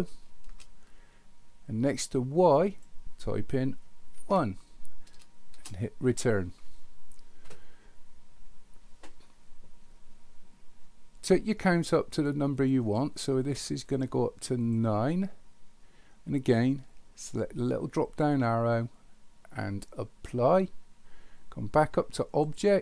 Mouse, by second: 2.7-7.3 drag, 12.1 click, 12.6 click, 13.2 click, 13.4 click, 13.9 click, 14.6 click, 18.0-20.3 drag, 22.3-22.8 drag.